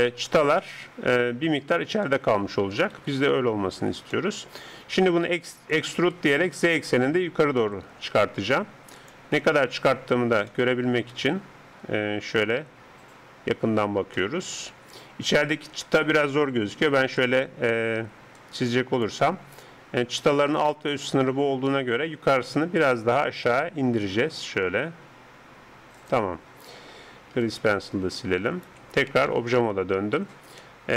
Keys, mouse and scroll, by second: 0.6-3.0 middle drag, 3.0 KP_3, 5.2 e, 9.4 z, 9.7-12.5 middle drag, 14.2-15.9 middle drag, 15.9-17.2 d, 18.2-21.4 d, 18.4-22.6 drag, 22.6 middle click, 23.4 g, 27.4 d, 27.4 right click, 28.7 d, 29.0 d, 29.3 Tab, 30.0 z, 30.6-30.9 middle drag.